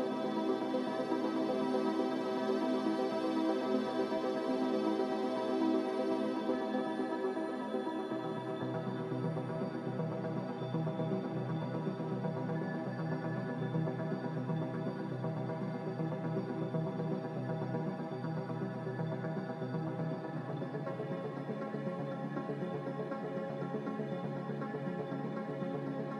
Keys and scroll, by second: 0.0 z, 1.7 s, 2.9-3.6 typing, 4.9-5.7 typing, 7.9-8.8 typing, 10.0-10.7 typing, 12.7 x, 20.4 n.